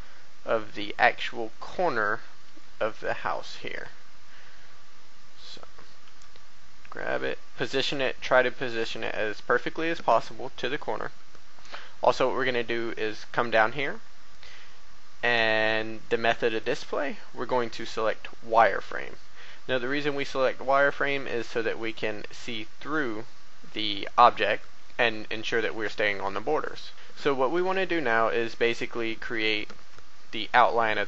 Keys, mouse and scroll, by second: 0.8-1.2 scroll up 1, 1.5 shift+middle click, 2.2 scroll up 1, 3.0 shift+middle click, 5.4 click, 6.0 g, 8.8 click, 9.8 click, 17.9 click, 18.8 a, 20.0 b, 20.2-23.4 drag, 23.4 a, 25.6 b, 26.6 right click, 28.5 scroll down 1, 29.4 shift+middle click.